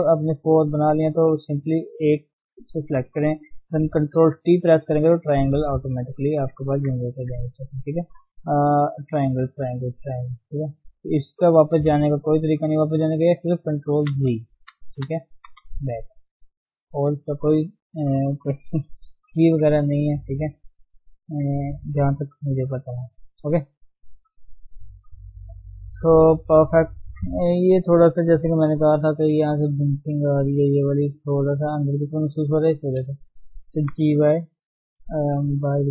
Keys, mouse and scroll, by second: 0.1-3.7 scroll up 3, 4.3 ctrl+t, 4.9-5.3 scroll up 2, 5.7 shift+middle click, 5.9-6.7 scroll down 5, 6.7 Tab, 7.1 Tab, 7.6 click, 7.9-9.4 middle drag, 9.4-9.9 scroll down 1, 10.0 middle click, 10.2 scroll down 1, 13.4 ctrl+z, 14.1 ctrl+z, 16.1 middle click, 16.4-18.6 scroll up 1, 19.1 KP_1, 19.6-20.2 scroll up 2, 20.2 shift+middle click, 20.9 Tab, 21.1-21.4 scroll up 3, 21.4 Tab, 22.2 1, 23.2 click, 23.7 click, 24.4-24.7 scroll down 4, 24.8 shift+middle click, 25.1 scroll up 1, 25.2 scroll down 1, 25.3 shift+middle click, 25.9 Tab, 26.1 scroll down 1, 26.2-28.4 middle drag, 28.4 KP_3, 28.8-29.3 scroll up 1, 29.3 Tab, 29.4-29.8 scroll up 1, 29.8 shift+middle click, 30.1 scroll up 1, 30.3 middle click, 30.9 scroll up 1, 31.7-32.9 middle drag, 32.9 click, 33.8 g, 34.9-35.9 middle drag.